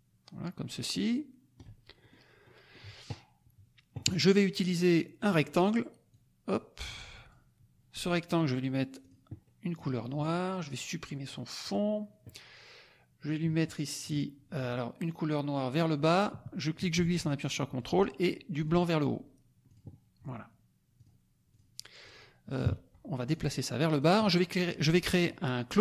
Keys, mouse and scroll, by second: 2.1 ctrl+middle click, 2.1 ctrl+scroll up 2, 2.3 ctrl+middle click, 5.1 click, 6.0-7.4 drag, 8.9 click, 9.4 middle click, 11.6 middle click, 14.0 click, 15.7-17.9 drag, 18.6 click, 19.6 click, 20.9 click, 21.5 click, 22.0 click, 22.6 KP_Subtract, 23.3 click.